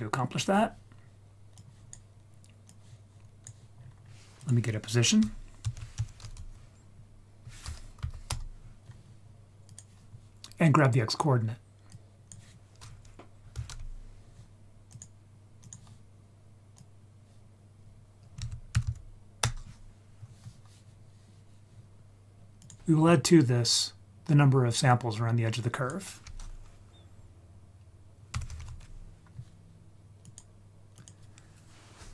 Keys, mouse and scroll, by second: 0.3-1.2 scroll down 3, 1.6 click, 2.7-3.5 drag, 4.0-4.5 scroll up 4, 4.4 click, 5.6 shift+a, 11.9-15.0 drag, 15.6 click, 16.8 click, 17.2-19.4 drag, 18.8 d, 22.6 click, 24.9 click, 25.3-30.4 drag, 30.9 click.